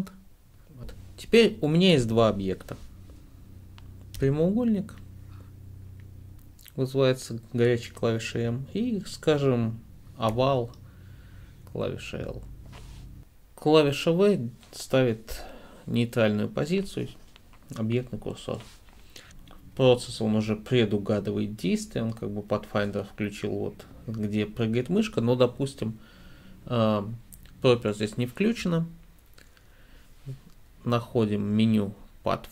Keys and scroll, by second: 4.2 m, 10.4 l, 13.2 v.